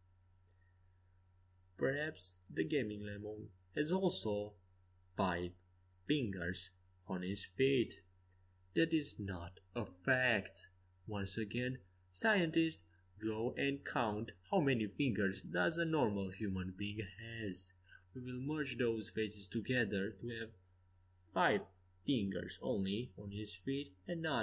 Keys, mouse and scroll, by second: 1.2-5.1 middle drag, 10.1 s, 12.3-13.9 middle drag, 14.7-21.3 right drag, 19.2 f, 21.3 click, 23.3 ctrl+z.